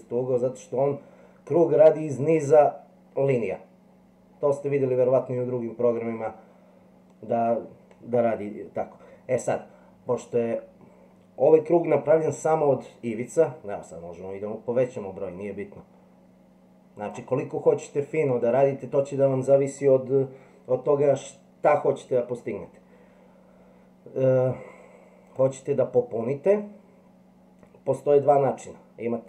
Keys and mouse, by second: 13.9-17.1 drag, 25.2-29.2 drag.